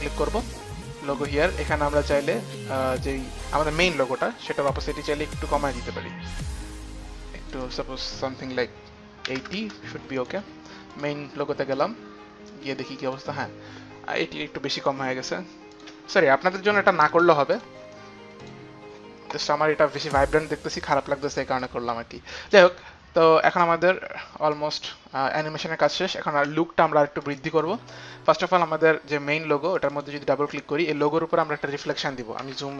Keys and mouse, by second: 0.2 click, 0.4 click, 1.9 click, 2.3 click, 3.1 click, 4.9 t, 7.8 click, 9.5 KP_8, 9.6 KP_0, 9.8 Return, 11.2 click, 12.1 Return, 12.1 KP_8, 12.1 KP_0, 12.7 KP_8, 15.0 click, 16.0 click, 17.0 KP_9, 17.1 KP_0, 18.6 click, 21.8 click, 22.8 click, 23.7 click, 24.8 click, 27.5 click, 30.0 click, 31.4 click.